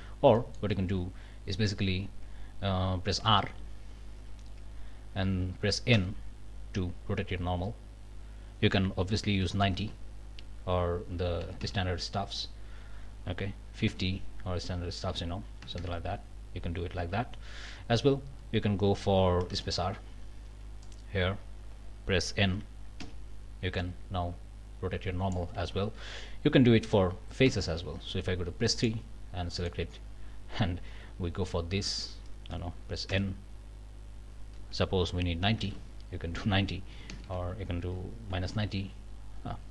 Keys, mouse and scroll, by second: 3.5 r, 5.9 n, 9.6 KP_9, 9.8 KP_0, 11.4 BackSpace, 13.8 KP_5, 14.0 KP_0, 15.6 BackSpace, 17.0 Escape, 19.4 space, 19.6 r, 20.8-25.5 drag, 23.0 n, 25.6 ctrl+z, 27.5 3, 28.8 click, 29.1 scroll down 2, 29.5 click, 31.5-39.7 drag, 33.1 n, 35.5 KP_9, 35.6 KP_0, 36.9 BackSpace, 38.3 KP_9, 38.4 KP_0.